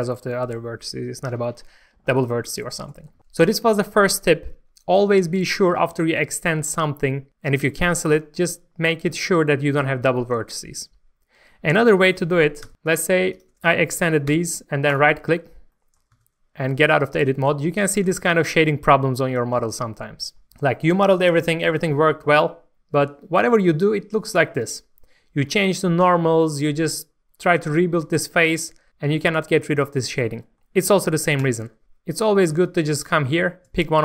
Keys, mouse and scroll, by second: 12.6 Tab, 12.7 shift+middle click, 12.8 click, 13.3 ctrl+shift+click, 14.9 right click, 15.8 middle click, 16.1 Tab, 16.5 scroll up 1, 17.0 shift+middle click, 18.0 alt+a, 18.3 middle click, 19.6 scroll down 1, 21.7-29.6 middle drag, 29.6 scroll up 1, 30.0 middle click, 31.4 Tab, 32.0 scroll down 1, 32.3 alt+a, 33.0 click, 33.3 scroll up 1, 33.7 shift+middle click.